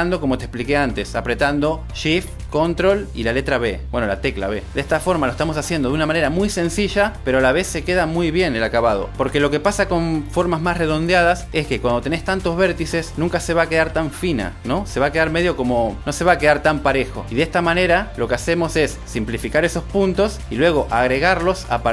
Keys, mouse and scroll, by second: 0.9 click, 1.7 ctrl+shift+b, 2.9 click, 4.1 click, 4.7 click, 5.0 ctrl+shift+b, 5.4 click, 5.5 click, 5.7 ctrl+shift+b, 6.3 click, 6.5 ctrl+shift+b, 7.0 click, 7.1 click, 7.3 ctrl+shift+b, 7.6 click, 7.9 ctrl+click, 8.1 ctrl+shift+b, 9.1 click, 9.3 ctrl+shift+b, 9.6 click, 11.1 ctrl+shift+b, 11.7 click, 12.3 g, 12.8 click, 17.0 click.